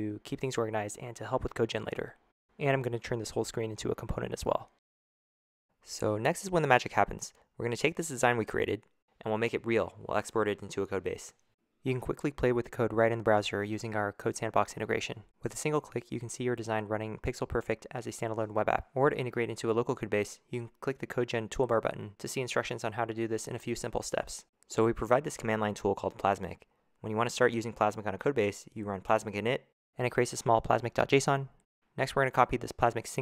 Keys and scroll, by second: 0.0-1.1 typing, 3.5-5.0 typing, 19.0 super+w.